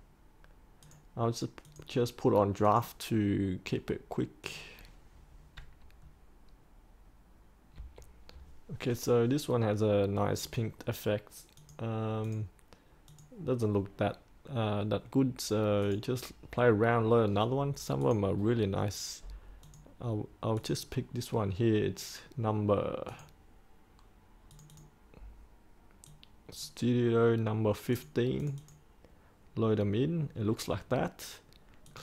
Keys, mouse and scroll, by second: 7.7 3, 10.4 click, 16.3-27.5 drag.